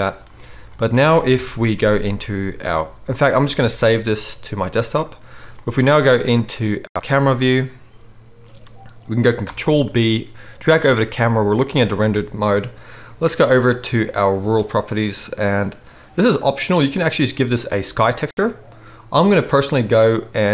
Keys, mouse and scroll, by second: 1.3 KP_0, 1.9 ctrl+s, 5.9-9.4 right drag, 5.9 z, 9.4 ctrl+b, 9.6 ctrl+right drag, 9.7 right click, 10.7 middle click, 10.7-11.8 right drag, 11.8-14.6 drag, 14.6 middle click, 14.7-16.5 drag, 16.5-20.5 middle drag.